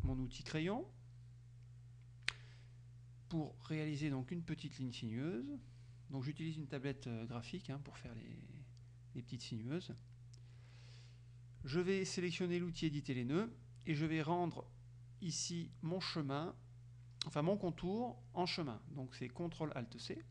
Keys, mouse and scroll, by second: 4.1-5.9 drag, 7.5 middle click, 8.9 middle click, 10.0 click, 12.8 click.